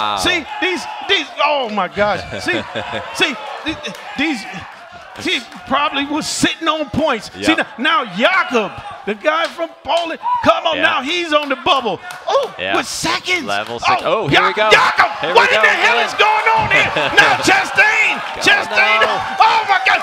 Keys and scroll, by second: 0.2 ctrl+Up, 0.5 ctrl+Page_Down, 1.1 ctrl+Page_Down, 1.6 Page_Down, 1.8 Page_Down, 2.2 Page_Up, 9.3 Down.